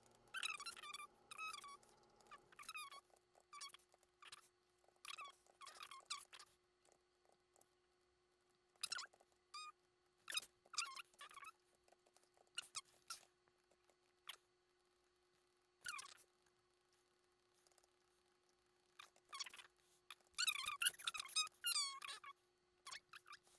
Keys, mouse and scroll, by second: 0.3 shift+middle click, 1.3 shift+i, 1.4 shift+middle click, 1.8 shift+middle click, 1.9 scroll up 1, 2.3 ctrl+z, 3.0 ctrl+z, 3.1 ctrl+z, 3.4 ctrl+z, 3.8 middle click, 3.9 shift+middle click, 4.6 middle click, 4.8 ctrl+z, 5.2 ctrl+z, 5.3 ctrl+z, 5.4 ctrl+z, 5.7 ctrl+z, 5.8 ctrl+z, 6.0 ctrl+z, 6.1 middle click, 6.2 shift+middle click, 6.3 shift+middle click, 6.9 ctrl+z, 7.3 ctrl+z, 7.6 ctrl+z, 8.5 middle click, 8.9-9.3 ctrl+z, 9.8 middle click, 11.2 middle click, 11.5 right click, 11.6 middle click, 11.7 Tab, 12.1 a, 12.1 shift+middle click, 12.2 scroll up 1, 12.4 ctrl+z, 12.6 ctrl+y, 12.9 middle click, 12.9 Tab, 13.0 middle click, 13.1 shift+middle click, 13.2 Tab, 13.7 Tab, 13.8 middle click, 13.8 Tab, 14.0 double click, 14.2 middle click, 14.8 double click, 15.0 middle click, 15.2 double click, 15.5 middle click, 16.2 double click, 16.4 middle click, 16.7 double click, 16.9 middle click, 17.1 double click, 17.2 middle click, 17.4 double click, 17.5 middle click, 17.6 shift+middle click, 17.7 shift+middle click, 17.8 shift+middle click, 17.9 double click, 18.0 middle click, 18.8 double click, 18.9 middle click, 19.0 Tab, 19.1 Tab, 19.4 alt+h, 19.5 middle click, 19.7 scroll down 1, 19.7 middle click, 20.2 shift+middle click, 20.7 shift+middle click, 20.9 shift+middle click, 21.1 shift+middle click, 21.2 shift+middle click, 21.3 middle click, 21.4 shift+middle click, 21.5 shift+middle click, 22.8 middle click, 23.4 shift+middle click.